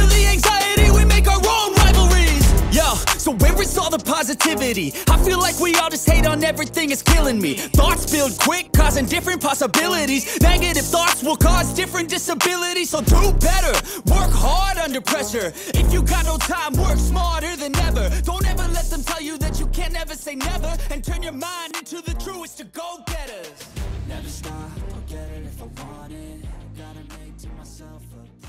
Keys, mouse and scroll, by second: 0.0-1.9 typing, 3.3-5.8 typing, 8.1-8.9 typing, 13.7 ctrl+shift+s, 19.5 typing, 21.1 Return, 23.5-24.1 typing.